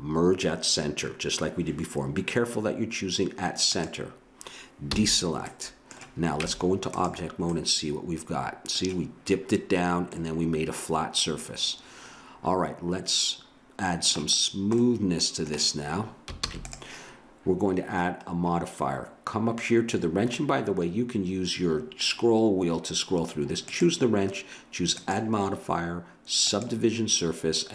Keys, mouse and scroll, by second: 4.9 a, 5.5 middle click, 6.4 Tab, 10.1-12.1 middle drag, 14.4 middle click, 16.4 ctrl+s, 23.7-26.8 drag.